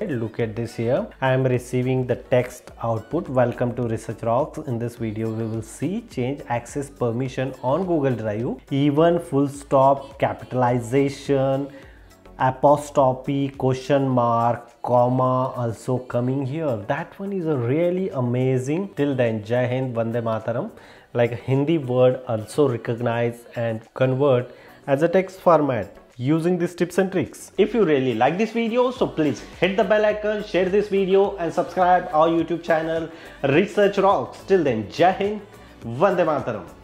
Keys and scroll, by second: 9.7 super+e, 27.1 super+e.